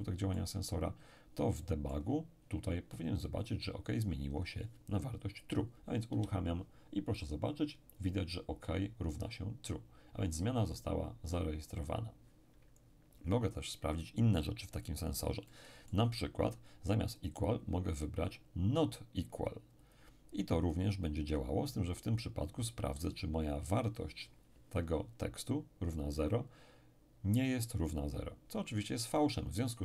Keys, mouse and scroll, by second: 1.0-1.6 scroll up 1, 1.6-2.9 middle drag, 6.1 p, 11.8 Escape, 15.1-15.4 scroll up 2, 15.4-16.9 middle drag, 17.2 click, 19.8 click.